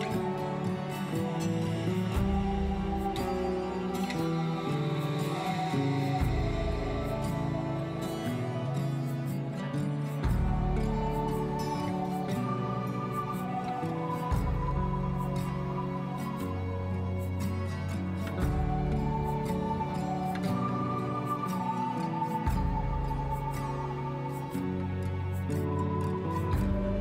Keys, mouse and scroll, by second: 1.8-3.7 shift+middle drag, 5.8-6.1 scroll down 3, 6.1-7.5 middle drag, 7.5-7.9 scroll down 2, 7.9-9.9 middle drag, 13.0-14.6 middle drag, 14.6 scroll down 3, 15.7 ctrl+s, 18.2 KP_0, 18.8-20.3 scroll down 4, 20.3-20.8 scroll down 1.